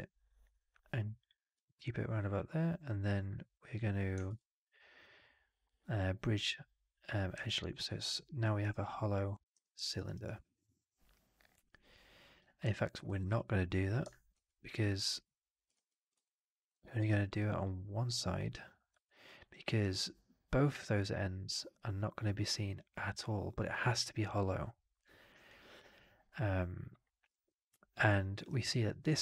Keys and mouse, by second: 4.1 shift+Tab, 7.3 alt+click, 8.5 alt+right click, 8.7 alt+click, 9.7 alt+middle click, 9.8 alt+right drag, 10.0 alt+right drag, 10.2-12.3 alt+drag, 13.1 ctrl+z, 14.2 ctrl+z, 16.1 click, 16.7 middle click, 17.0 right click, 17.3 click, 18.9 alt+click, 19.2 alt+right click, 19.4 alt+click, 25.3-28.3 alt+drag.